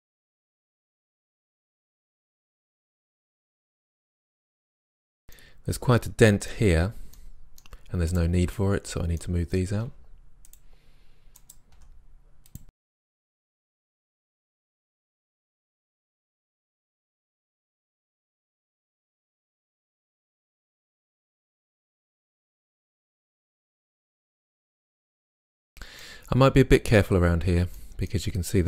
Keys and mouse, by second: 0.0 click, 0.5 g, 0.7-1.1 drag, 1.4-1.8 drag, 1.6 g, 1.8 right click, 2.0 right click, 2.2 g, 2.9 right click, 2.9 g, 3.2 right click, 3.5 click, 3.7 right click, 3.9 g, 4.3 middle click, 5.4 middle click, 9.9 g, 10.5-11.4 drag, 11.8 g, 12.7 middle drag, 13.6 click, 13.6-17.3 typing, 14.4 drag, 14.7 middle click, 14.9 click, 15.1 click, 15.8-16.3 drag, 17.1 click, 17.3 drag, 17.6 click, 18.3 right click, 18.6-20.4 typing, 18.9 click, 19.5 click, 20.5 click, 20.7 middle click, 20.9 click, 21.4 right click, 21.7 right click, 22.5 right drag, 22.5 g, 22.9 drag, 23.2 right click, 23.3 drag, 23.7-24.6 drag, 23.7 g, 25.3 ctrl+z, 27.8-28.6 middle drag.